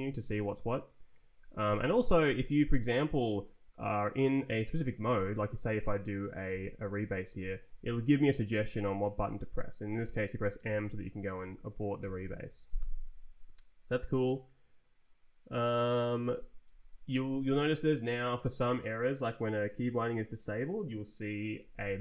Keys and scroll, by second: 0.3 Up, 1.1 Escape, 1.8 Right, 2.5 Up, 5.1 Down, 5.7 Down, 6.5 e, 10.6 m, 11.4 Down, 12.0 Return, 16.7 ctrl+t, 17.4 Up, 21.6 shift+c.